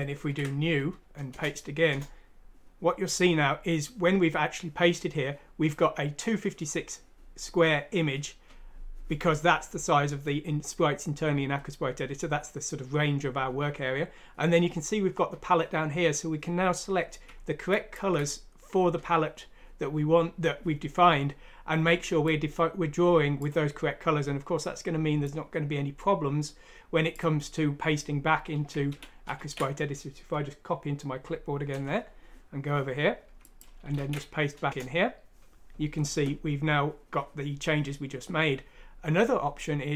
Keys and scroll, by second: 33.9 ctrl+v, 34.7 Return.